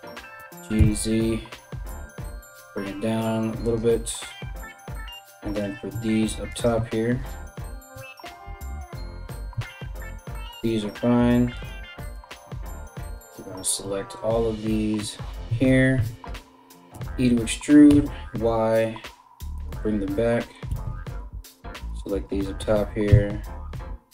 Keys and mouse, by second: 0.0 g, 5.2 click, 5.3 ctrl+middle click, 6.1 ctrl+click, 6.2-8.2 ctrl+middle drag, 8.2 shift+click, 8.4-24.1 shift+middle drag, 9.1 KP_3, 10.1 g, 11.7 alt+right click, 12.7 alt+right click, 13.0 alt+right click, 15.1 KP_3, 16.5 e, 20.3 a, 20.4 a, 20.7 b, 22.2 g.